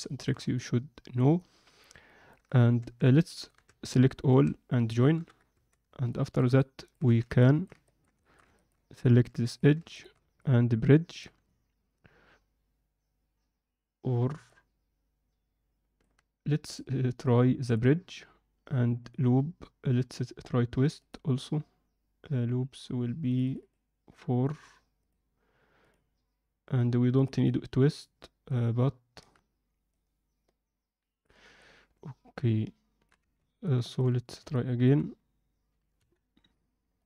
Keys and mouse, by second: 0.0 ctrl+middle drag, 0.5-2.2 middle drag, 2.8 Tab, 3.1 alt+middle click, 3.6 Tab, 4.2 a, 5.1 ctrl+j, 5.5 Tab, 6.1 alt+shift+middle click, 6.6 alt+middle click, 7.0 z, 7.4 alt+middle click, 7.8 ctrl+middle click, 8.2 alt+shift+middle click, 8.5 ctrl+middle click, 9.2 2, 9.5 click, 9.9 shift+click, 10.4-11.2 alt+middle drag, 14.4-16.0 middle drag, 16.6-17.7 drag, 21.0-28.1 drag, 28.5 alt+middle click, 30.0-31.2 drag, 31.6-33.0 alt+middle drag, 33.3 ctrl+z, 33.9 alt+click, 34.5 alt+middle click, 35.9 KP_1, 36.9 middle click.